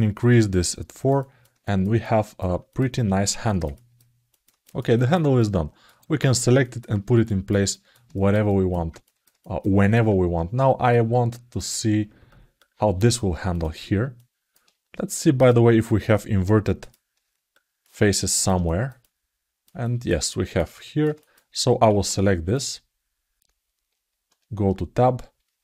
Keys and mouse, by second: 0.2 click, 0.7 ctrl+alt+middle click, 1.4 alt+shift+middle click, 1.8 alt+middle click, 2.5 click, 3.2 ctrl+alt+middle click, 4.1 alt+middle click, 4.4 alt+shift+middle click, 4.7 ctrl+alt+middle click, 5.1 alt+middle click, 6.4 alt+shift+middle click, 7.0 alt+shift+middle click, 7.5 ctrl+alt+middle click, 7.9 alt+shift+middle click, 8.2 alt+middle click, 8.8 ctrl+alt+middle click, 9.2 alt+shift+middle click, 9.6 alt+middle click, 13.3 click, 13.9 alt+middle click, 15.1-17.6 drag, 17.3 alt+shift+middle click, 17.3 alt+shift+right click, 17.8 ctrl+alt+middle click, 18.4 alt+shift+middle click, 18.8 alt+middle click, 19.6 alt+shift+middle click, 20.0 ctrl+alt+middle click, 20.3 alt+middle click, 20.5 alt+shift+middle click, 20.9 ctrl+alt+middle click, 21.6 alt+q, 22.4 click, 24.1 Tab.